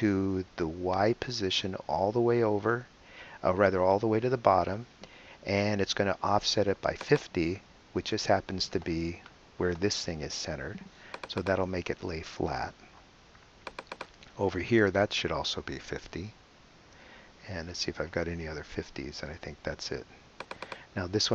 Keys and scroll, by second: 15.2-16.1 typing.